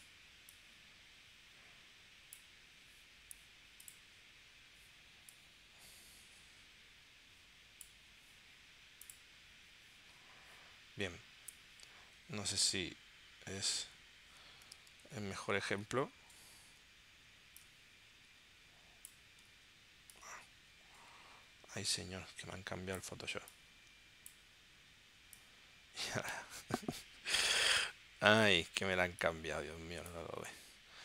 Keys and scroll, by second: 14.9 super+t, 28.2 super+t.